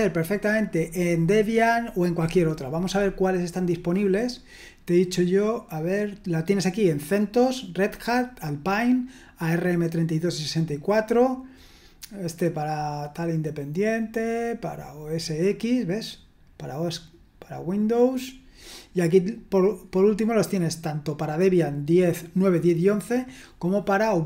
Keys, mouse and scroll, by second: 14.2-14.9 scroll down 1, 14.9 scroll down 1, 18.8-19.9 scroll down 1.